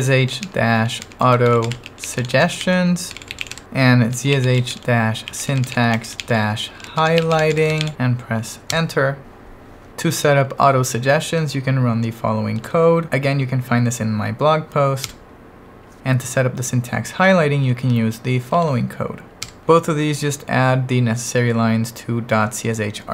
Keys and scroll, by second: 0.0-8.3 typing, 8.8 Return, 12.6 super+v, 15.0 Return, 18.5 super+v, 19.5 Return.